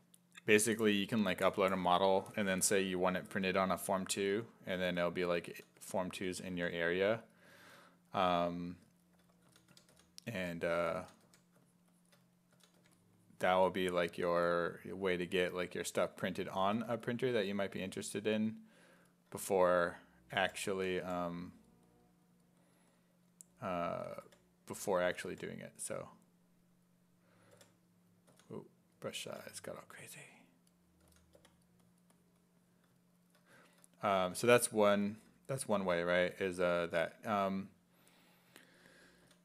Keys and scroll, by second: 4.9-7.1 typing, 9.2-12.8 typing, 16.5 s, 16.8 1, 17.9 s, 19.5-21.5 typing, 23.9 s, 24.3 5, 25.0 s, 25.3 5, 27.6 5, 28.3 s, 29.3 5, 31.1 s, 31.4 4, 34.2 s, 39.2 s.